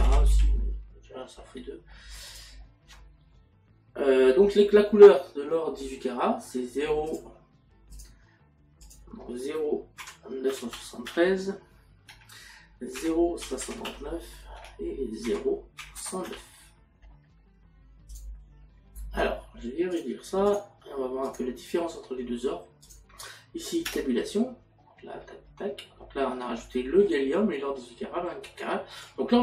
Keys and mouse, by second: 0.0 r, 2.3 click, 7.1 click, 8.9 click, 10.1 KP_Decimal, 13.0 KP_Decimal, 14.6 Tab, 15.3 KP_Decimal, 18.1 click, 20.0 click, 22.9 click, 26.2 middle click, 27.8 middle click, 29.1 click.